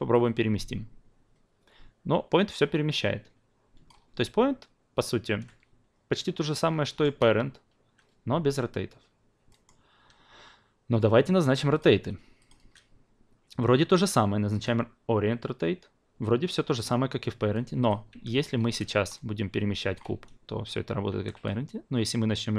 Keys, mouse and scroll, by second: 0.1-3.9 drag, 5.2 ctrl+z, 6.8-7.9 alt+middle drag, 9.5-11.4 alt+middle drag, 11.4 click, 11.7 click, 12.4-14.6 shift+drag, 17.8 click, 18.1 e, 18.6 w, 19.0-19.9 drag, 20.1 ctrl+z, 21.1 e.